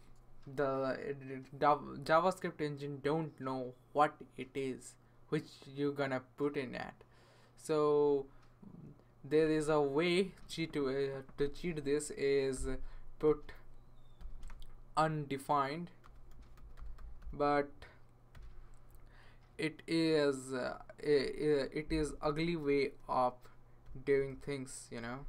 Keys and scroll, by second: 11.3 Right, 12.6 ,, 13.2 Left, 13.9-19.5 typing, 22.4 Left, 22.6-25.2 typing.